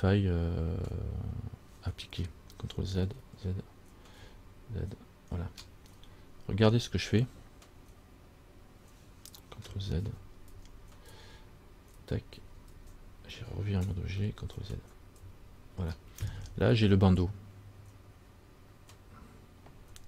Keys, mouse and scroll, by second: 3.4 ctrl+z, 4.4 ctrl+z, 10.3 ctrl+z, 10.7 ctrl+z, 11.3 ctrl+z, 12.2 ctrl+z, 12.6 ctrl+z, 12.9 ctrl+z, 14.0 Tab, 14.8 ctrl+z, 15.4 ctrl+z.